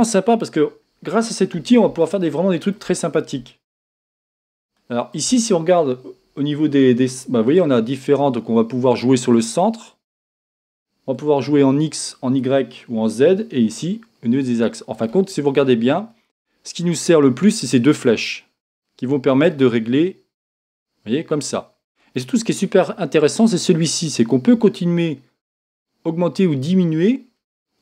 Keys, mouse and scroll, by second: 2.0-7.5 shift+middle drag, 7.5-19.6 drag, 20.7-22.0 drag, 24.0-27.8 drag.